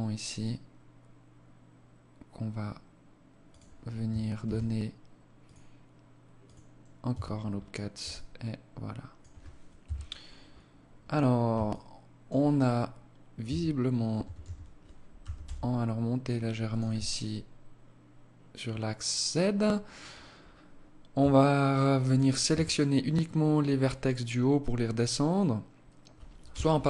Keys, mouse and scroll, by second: 3.7 ctrl+r, 6.4 Tab, 6.9 scroll down 4, 7.4 alt+click, 9.1 KP_1, 9.9 scroll down 2, 11.0 alt+shift+click, 12.7 Tab, 13.5 a, 13.7 a, 14.5 g, 16.4 scroll up 2, 18.0 scroll down 1, 20.6 alt+click, 21.8 a, 25.8 z.